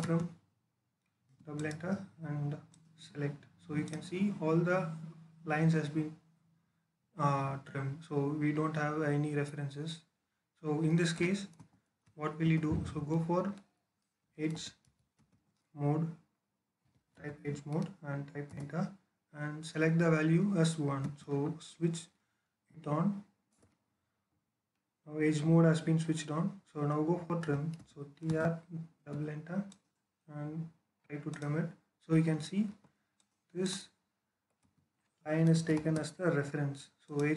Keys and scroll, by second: 1.1 space, 11.4 ctrl+z, 12.3 Escape, 14.1-15.0 typing, 16.6-17.2 typing, 18.3 Return, 20.9-22.5 typing, 23.4 Return, 27.0-28.8 typing, 32.5 Escape, 34.6 Escape, 35.1-35.9 typing.